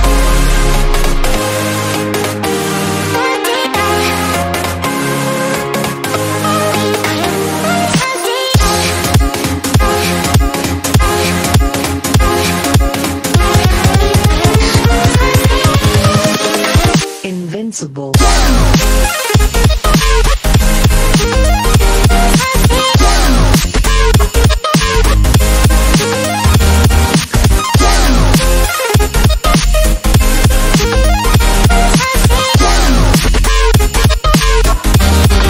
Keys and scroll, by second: 26.9 ctrl+j.